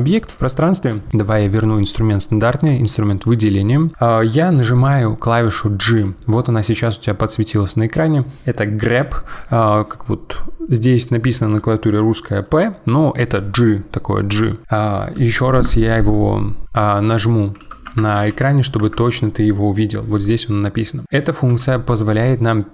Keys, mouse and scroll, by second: 2.6-4.9 drag, 5.9 g, 16.7 g, 18.3 g, 21.5 g.